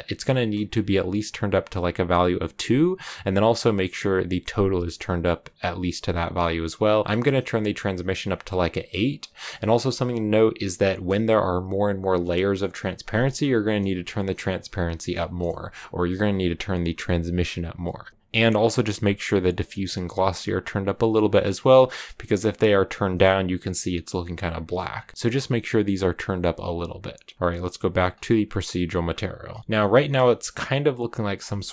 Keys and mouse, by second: 1.5 click, 7.0 click, 7.4 click, 7.5 click, 8.2 click, 9.3 click, 9.7 g, 10.7 click, 18.1 click, 21.5-24.9 drag, 27.3 click, 28.1 click, 29.7 shift+click.